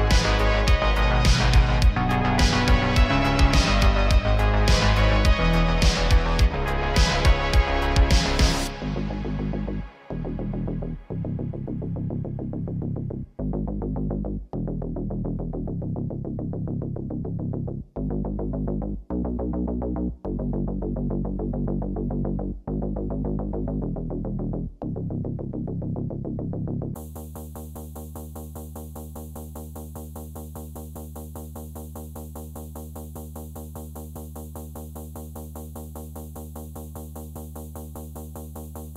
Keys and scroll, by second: 6.4 g, 6.6 x, 6.8 x, 9.4 g, 9.6 x, 9.7 x, 11.0 g, 11.2 x, 11.3 x, 17.3 g, 17.4 z, 32.7 Tab, 37.2 Tab, 37.6 Tab, 37.9 Tab, 38.5 Tab.